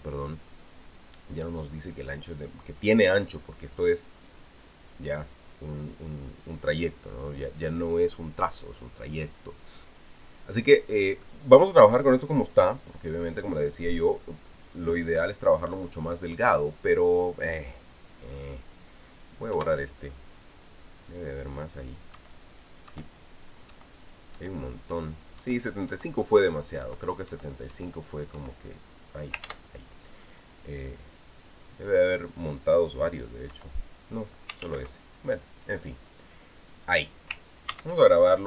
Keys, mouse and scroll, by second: 14.7 click, 19.1 click, 20.3 Delete, 21.8 click, 22.9 Delete, 23.3 click, 23.7 Delete, 24.1 click, 24.5 Delete, 24.8 click, 25.2 Delete, 25.4 click, 25.9 click, 26.4 click, 26.9 click, 27.4 click, 27.9 click, 28.3 click, 28.8 click, 29.2 Delete, 30.2 ctrl+z, 31.1 click, 33.1 click, 34.3 Delete, 35.4 ctrl+z, 36.1 click, 37.6 click.